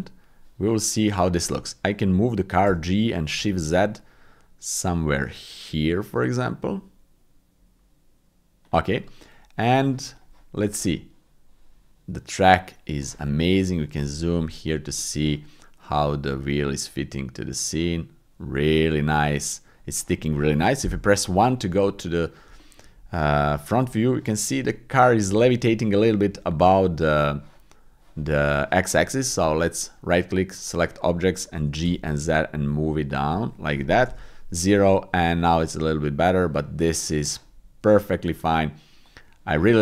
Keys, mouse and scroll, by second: 0.0 click, 2.6 g, 3.4 shift+z, 10.1 click, 13.5 shift+middle click, 14.1 shift+middle click, 14.4 middle click, 15.0 shift+middle click, 16.0 click, 17.2 middle click, 18.7 middle click, 19.1 middle click, 19.8 middle click, 20.8 KP_1, 22.5 shift+middle drag, 29.5-30.6 right drag, 30.6-31.8 typing, 34.0 KP_0, 34.2 middle click, 35.6 click, 37.0 middle click, 37.2 middle click, 37.5 middle click, 39.0 click.